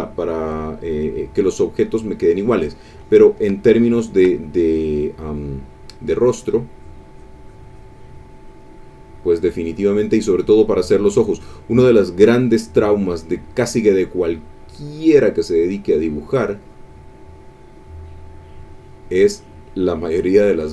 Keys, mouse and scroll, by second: 3.6 shift+click, 6.2 click, 6.7 click, 7.1 click, 7.4-8.8 drag, 14.8 click, 15.4 click, 16.6-18.3 drag, 18.3 click, 19.7 click, 20.5 click.